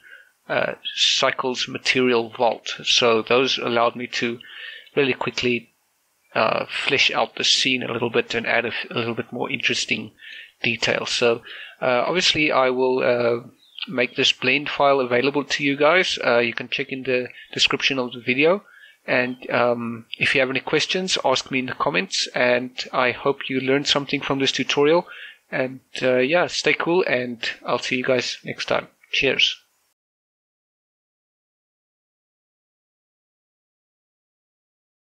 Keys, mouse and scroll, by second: 12.7 shift+middle click.